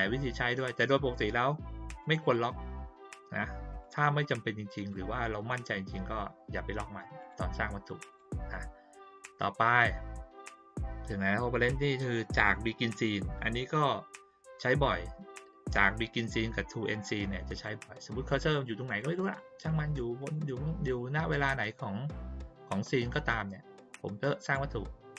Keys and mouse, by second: 2.0 click, 2.2 click, 3.2 click, 3.8 click, 4.2 click, 4.7 click, 7.2 click, 8.0 click, 9.2 click, 17.5 click, 18.3 click, 18.8 click, 19.2 click, 19.6 click, 20.2 click, 24.4 click.